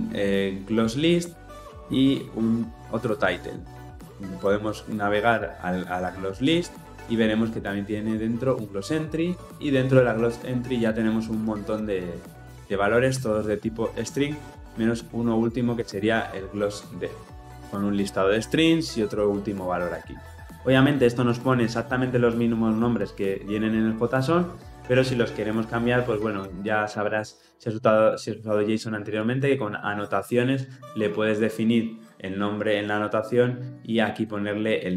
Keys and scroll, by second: 6.5 ctrl+b, 15.9 ctrl+b.